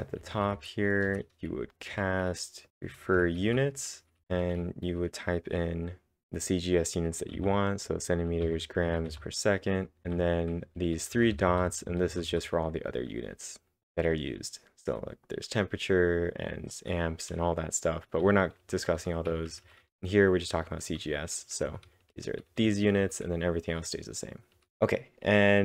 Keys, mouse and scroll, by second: 0.0-0.1 typing, 1.0 Return, 1.7-6.2 typing, 7.3 w, 11.8-12.9 typing, 18.4-24.5 typing.